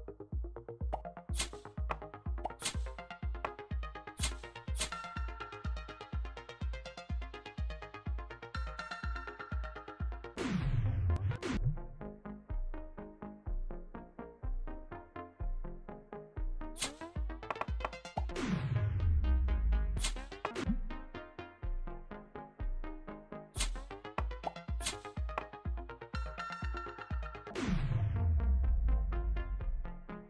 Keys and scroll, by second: 0.3 Right, 0.8 space, 1.2 w, 2.3-4.6 typing, 5.8 d, 6.3 a, 7.1 a, 8.0 d, 9.4 d, 10.2 s, 11.0 Down, 11.2 Down, 11.4 space, 16.6 Up, 17.1 Right, 17.7 Right, 18.0 space, 18.2 Down, 18.7 Right, 19.8 Up, 20.1 Left, 20.4 Down, 20.5 space, 21.6 Left, 23.4 Up, 24.3-25.9 typing, 27.4 s.